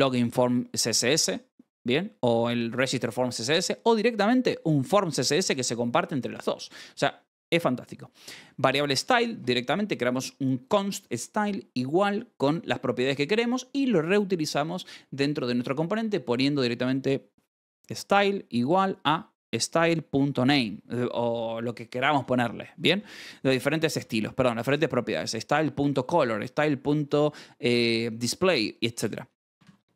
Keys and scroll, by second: 6.8 Escape, 22.9-24.0 typing, 24.2 Escape, 28.8 Escape, 29.5 shift+v.